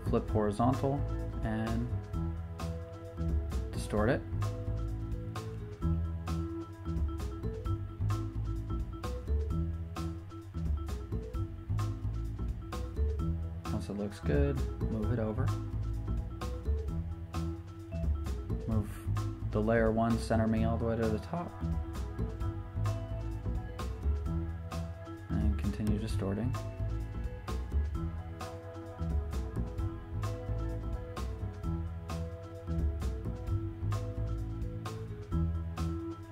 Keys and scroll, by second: 0.7 Return, 2.6 v, 4.0 super+t, 7.7 super+Return, 9.9 super+t, 17.6 Return, 17.9 v, 24.4 v, 29.5 super+t.